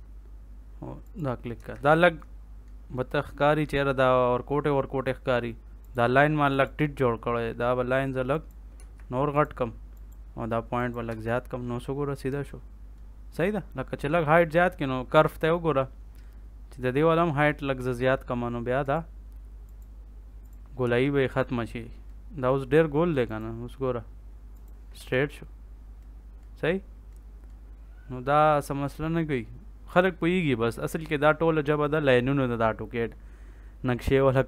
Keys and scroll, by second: 1.5 Escape, 8.7 Escape, 11.0 Escape, 20.8 Escape, 24.9 Escape.